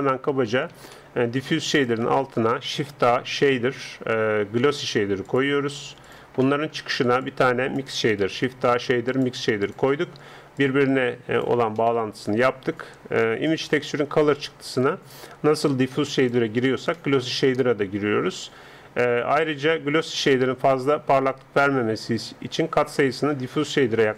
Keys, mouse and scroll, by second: 1.8-2.9 middle drag, 2.9 shift+a, 7.4-9.2 drag, 8.2 shift+a, 10.6-13.3 drag, 13.5-16.3 drag, 20.8-24.1 drag.